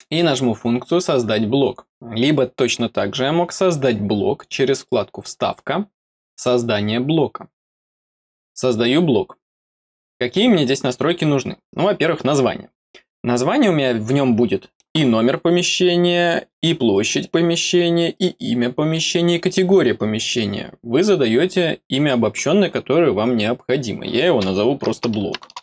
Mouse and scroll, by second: 4.7 click, 6.3 click, 7.6 click.